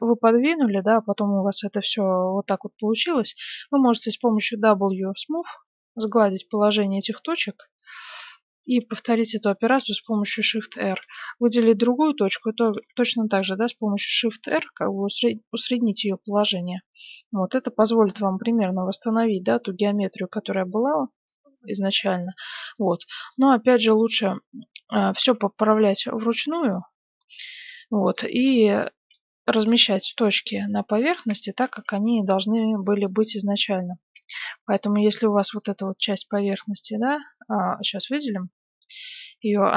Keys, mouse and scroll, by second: 1.0-4.2 middle drag, 3.9 w, 6.5-8.8 middle drag, 8.6 shift+r, 9.0 shift+r, 9.6 shift+r, 10.0-11.8 right drag, 11.8-12.6 typing, 13.0-14.6 middle drag, 15.8-18.7 middle drag, 18.7-19.8 drag, 21.6-23.5 drag, 22.5-25.2 middle drag, 23.4 z, 25.2 KP_1, 25.7 middle click, 26.1-27.4 middle drag, 26.2 z, 29.1 click, 29.8 middle click, 30.0 right click, 31.4 click, 31.4-32.7 right drag, 31.9 a, 32.2 b, 32.7 middle click, 35.5 b, 35.7-37.1 middle drag, 36.2 a, 36.4 b, 39.5-39.7 drag.